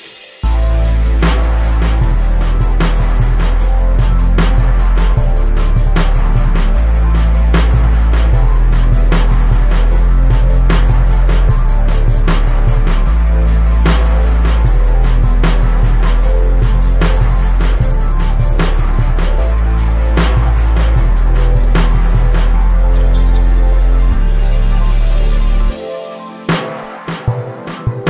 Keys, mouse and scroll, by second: 1.4 click, 1.9 KP_0, 5.5 click, 6.4 ctrl+t, 7.3 z, 8.1-9.2 drag, 11.1-12.9 drag, 14.2-15.3 drag, 16.9-18.4 drag, 18.4 right click, 19.9 click, 20.8 click, 21.4 click, 21.7 Delete, 21.9-24.4 middle drag, 24.4 click, 25.0-28.0 drag.